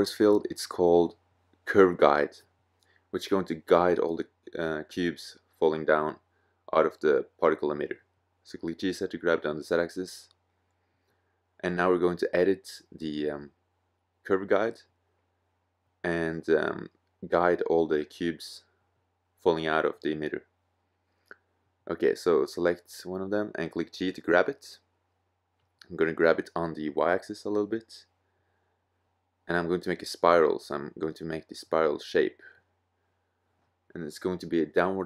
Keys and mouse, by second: 3.6 middle click, 4.4-8.8 middle drag, 5.9 g, 8.9 middle click, 10.7-13.2 middle drag, 14.1-14.9 drag, 15.1 click, 15.8-17.0 middle drag, 19.0 middle click, 22.8 g, 23.2 click, 27.3-28.9 middle drag, 28.9 click, 29.8-30.9 middle drag, 30.9 g, 32.9 middle click.